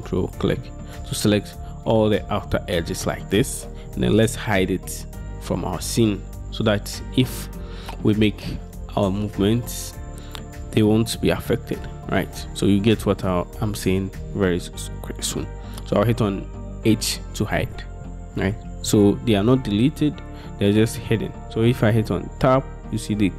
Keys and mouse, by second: 0.3 ctrl+shift+click, 17.0 h, 22.4 Tab.